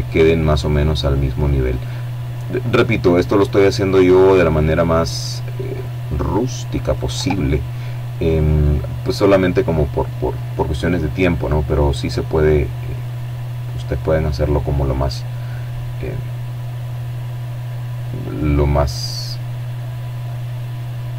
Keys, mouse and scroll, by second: 1.0 right click, 1.8 right click, 2.6-3.8 drag, 4.2 right click, 4.6 click, 5.6 Tab, 9.8-10.8 drag, 11.6 click, 14.4-15.1 scroll down 1, 17.5-18.1 scroll up 1, 19.2 click.